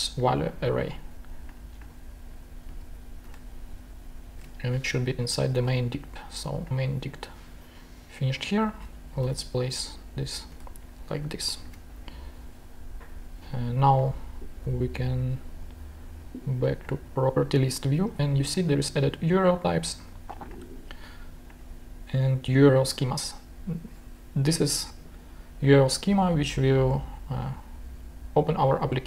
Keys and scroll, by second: 2.7 shift+super+c, 3.1 shift+super+Tab, 4.3 shift+super+Tab, 5.7 shift+super+Tab, 8.8 shift+Return, 9.1 shift+super+v, 11.2 shift+Tab.